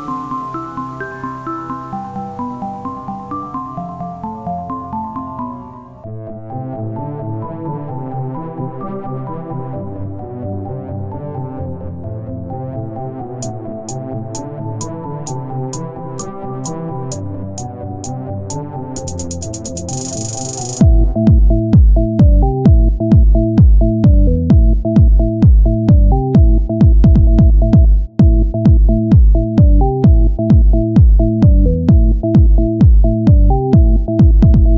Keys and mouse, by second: 0.8 KP_1, 2.8-6.0 middle drag, 3.1 z, 6.5 shift+a, 11.3 z, 13.6 KP_1, 14.0 z, 15.2-16.2 drag, 16.2 z, 18.7-21.9 right drag, 18.9 Tab, 21.9 KP_1, 22.3 z, 25.7 s, 28.4-30.4 drag, 30.4 Tab.